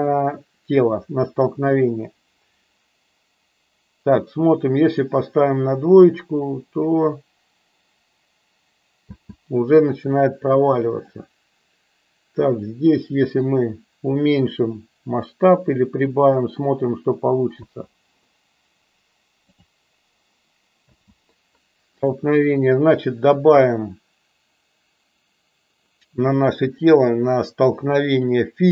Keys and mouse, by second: 5.0 click, 9.2 space, 10.0-11.1 drag, 12.5-16.5 drag, 17.5 space, 19.6-20.0 drag, 21.1 space.